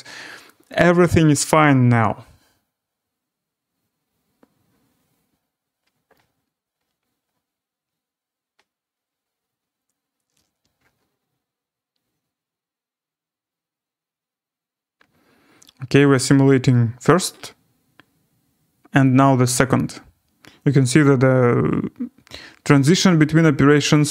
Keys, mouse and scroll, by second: 0.2-1.1 scroll up 6, 2.2-2.7 scroll, 8.2 scroll.